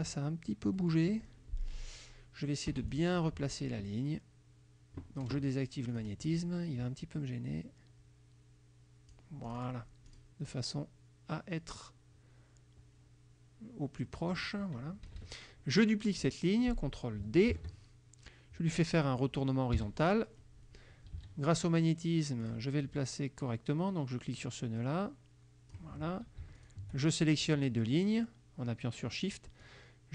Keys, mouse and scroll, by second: 0.9 click, 2.8 F2, 3.0 click, 6.0 click, 7.4-9.4 drag, 9.5 click, 10.2 click, 14.1 click, 15.1 KP_Subtract, 16.3 click, 17.6 ctrl+d, 19.8 h, 21.3 ctrl+a, 22.5 click, 24.5-26.0 drag, 26.6 shift+click, 29.7 click.